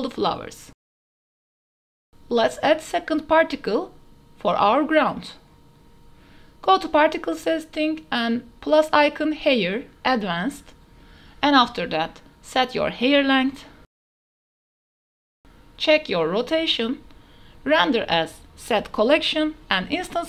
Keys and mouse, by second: 0.3 click, 1.0 click, 1.7 ctrl+a, 1.9 click, 3.0 ctrl+a, 3.1 click, 3.3 click, 4.0 click, 5.5 shift+drag, 5.9 click, 6.6 KP_0, 8.2 click, 9.6-11.3 drag, 12.1 click, 13.3-14.8 drag, 15.7 click, 16.9-17.9 drag, 19.1-20.2 drag.